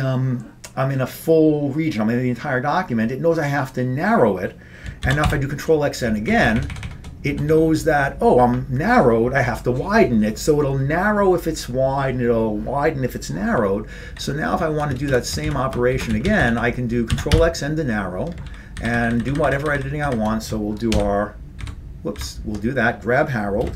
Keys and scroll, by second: 5.1 ctrl+x, 5.3 n, 6.3 Up, 6.6 Up, 6.6 Up, 6.8 Up, 7.5 Down, 7.6 Down, 14.2 ctrl+p, 15.5 ctrl+space, 15.5 ctrl+n, 16.0 ctrl+shift+space, 16.2 ctrl+n, 16.3 ctrl+n, 16.5 ctrl+n, 17.2 ctrl+x, 17.4 n, 18.5 ctrl+p, 18.9 ctrl+f, 19.0 ctrl+f, 19.2 ctrl+f, 19.3-20.3 ctrl+f, 21.0 ctrl+;, 21.7 ctrl+;, 22.2 ctrl+;.